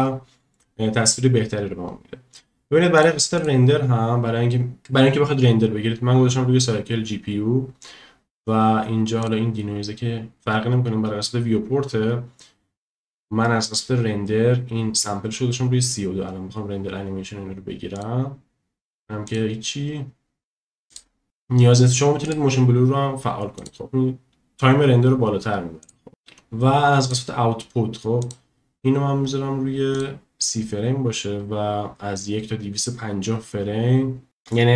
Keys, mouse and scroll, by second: 2.9 click, 3.3 click, 9.2 click, 17.9 click, 19.2 click, 20.9 click, 22.2 click, 23.6 click, 25.8 click, 27.0 click, 28.2-30.0 drag.